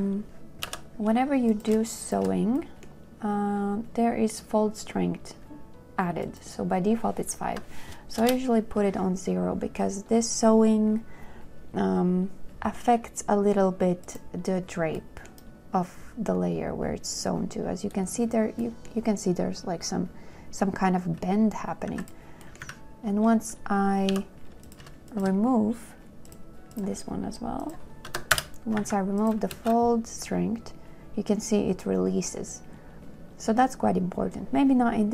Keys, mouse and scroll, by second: 0.9 b, 2.3 shift+click, 7.7 KP_0, 8.5 Return, 22.2 z, 22.9 a, 24.3 b, 25.3 shift+click, 28.3 KP_0, 28.7 Return, 29.1 a, 29.8 space.